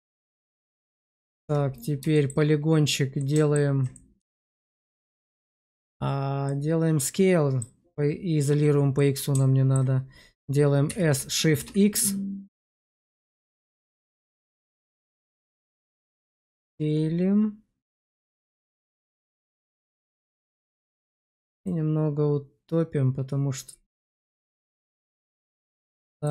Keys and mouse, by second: 0.3 shift+middle click, 0.6 middle click, 1.3 Tab, 1.6 click, 2.0 shift+middle click, 3.1 alt+middle click, 3.8 middle click, 4.6 shift+middle click, 6.4-7.5 middle drag, 8.9 middle click, 10.8 s, 11.6 BackSpace, 15.9 s, 15.9 shift+x, 19.6-20.7 middle drag, 21.6 click, 21.9 click.